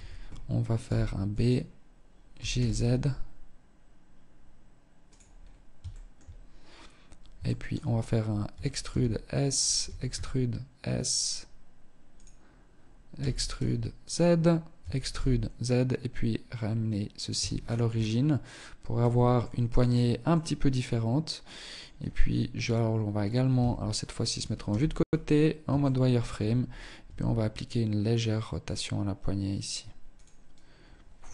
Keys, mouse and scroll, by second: 0.0 b, 1.5 g, 4.2 g, 4.5-5.0 scroll up 3, 5.0 shift+middle click, 6.7 shift+middle click, 7.7 e, 9.0 e, 12.3 e, 13.3 click, 13.9 e, 16.5 Tab, 16.7-17.4 scroll down 8, 18.1 z, 18.5 middle click, 18.9-19.5 scroll down 1, 19.5 middle click, 19.5 scroll down 1, 22.7 KP_3, 23.8 z, 24.0-24.9 scroll up 7, 24.9 shift+middle click, 26.1 r, 29.3 click, 31.1 z.